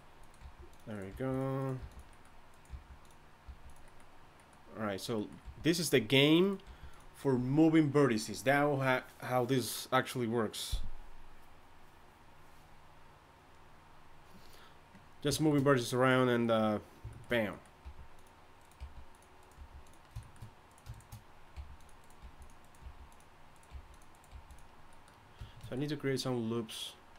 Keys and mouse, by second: 0.0-3.4 typing, 5.4 g, 6.6 g, 16.0-17.5 right drag, 17.5 click, 17.8 g, 18.6 click, 18.8 g, 19.4 click, 19.6 g, 20.0 click, 20.7 click, 21.5-24.3 typing.